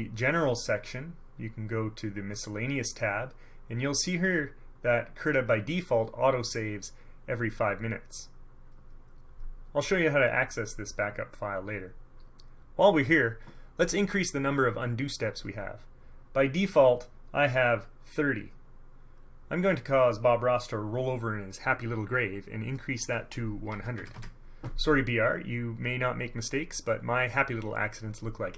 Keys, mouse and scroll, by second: 2.5 click, 22.9 click, 23.9 KP_1, 24.1 KP_0.